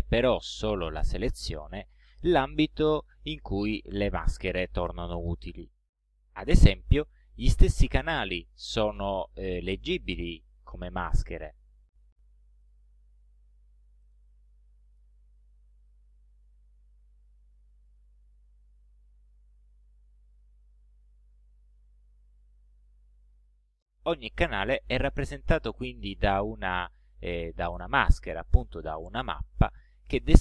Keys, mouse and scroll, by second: 7.1 click, 12.1 click, 12.4 click, 13.1 right click, 15.0 click, 16.3 click, 18.3 click, 18.8 click, 19.6 ctrl+scroll up 2, 20.0 ctrl+click, 20.2 middle click, 22.0 click, 22.7 click.